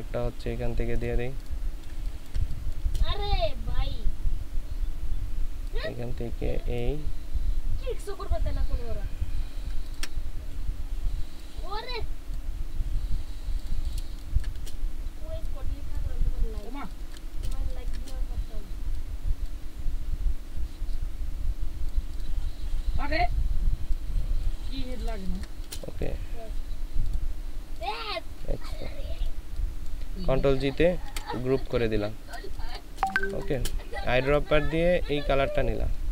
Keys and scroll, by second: 1.9 ctrl+space, 14.1 ctrl+space, 17.5 ctrl+space, 25.1 ctrl+space, 31.0 ctrl+g, 32.4 ctrl+space, 33.1 ctrl+space.